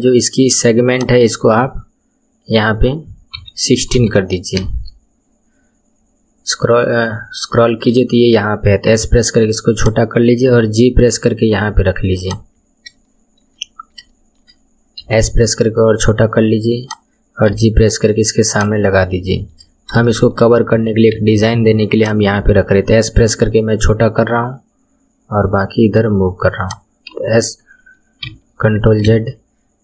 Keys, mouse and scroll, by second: 0.9-3.9 drag, 5.4-7.5 scroll down 10, 7.5-8.9 shift+middle drag, 8.9 s, 10.4 g, 12.5-13.1 scroll up 6, 13.1 shift+middle click, 13.6-14.0 scroll up 6, 14.1 shift+middle click, 15.0 s, 17.5 g, 18.9 scroll up 4, 19.3 shift+middle click, 19.7 scroll up 1, 20.0-21.1 shift+middle drag, 21.1 s, 22.4 g, 27.1 a, 28.2 Escape, 29.1 ctrl+z.